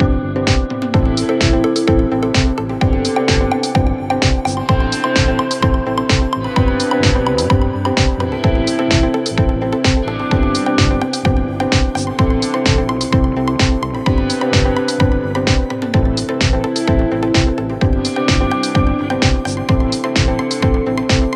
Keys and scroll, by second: 3.3 c, 10.1 F9, 12.9 shift+F2, 13.1 Escape, 14.5 F9.